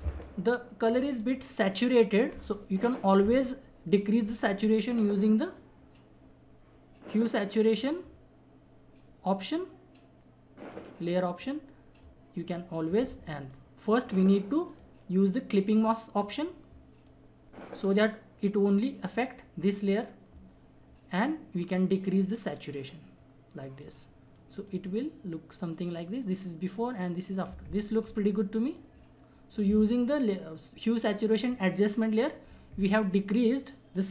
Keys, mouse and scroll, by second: 0.0 space, 0.2 click, 0.5 space, 5.4-11.1 drag, 9.8-11.1 drag, 13.9 click, 14.7 right click, 16.2-20.4 drag, 22.0-24.3 drag.